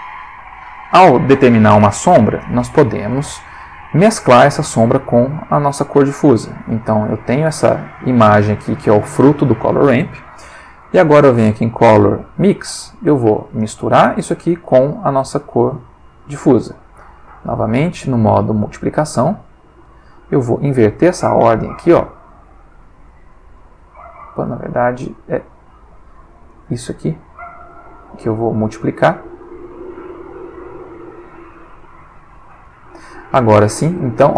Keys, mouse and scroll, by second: 0.1 click, 3.1-5.1 drag, 6.7 click, 8.8 click, 10.5 shift+a, 12.4 click, 13.6 click, 15.4-16.4 drag, 16.6-17.4 drag, 17.7-19.6 drag, 20.6-24.6 drag, 26.5-27.6 drag, 28.1-28.8 drag, 29.8 click, 31.4 click, 32.6-33.3 drag, 33.6-34.3 drag.